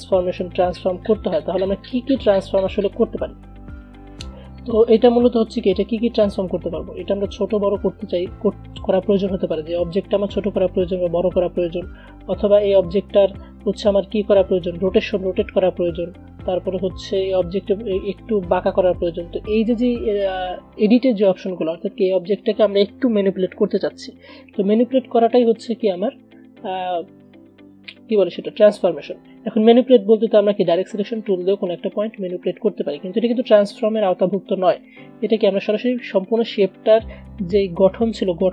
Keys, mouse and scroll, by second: 35.6 ctrl+z.